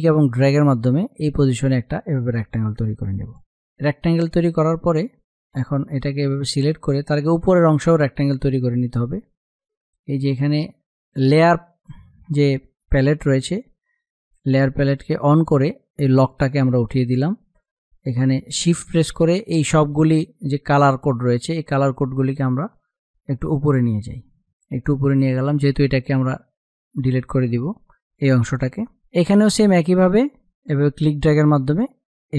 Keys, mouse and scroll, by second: 0.3-3.3 drag, 6.4 space, 6.5 click, 6.8 space, 8.0 click, 8.3 space, 9.0 click, 15.8-27.0 drag, 27.1 click, 27.6 space, 27.8 click, 28.2 space, 28.7-32.3 drag.